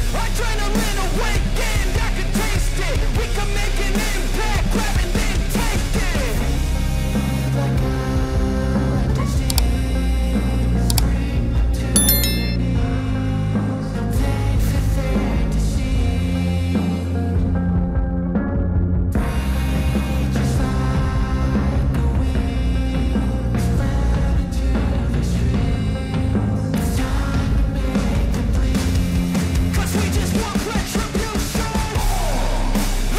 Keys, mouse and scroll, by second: 4.8-10.6 drag, 15.3-18.4 drag, 25.7 click, 28.5 Delete, 29.6 click, 31.6 ctrl+z.